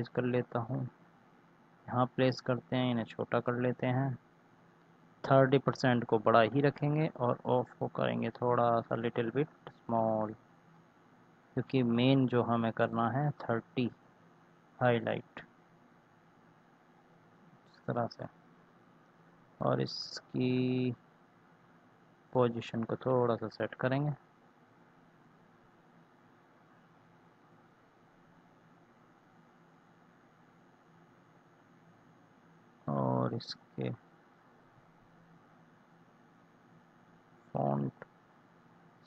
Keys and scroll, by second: 11.2 ctrl+z, 26.2 ctrl+z.